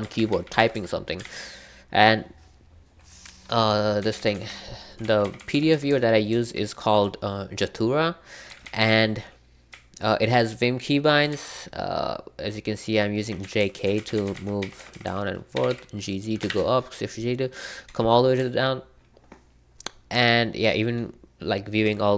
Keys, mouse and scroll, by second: 0.0-0.7 typing, 1.2 super+k, 4.0-5.3 typing, 8.2-16.4 typing, 18.3-20.1 typing.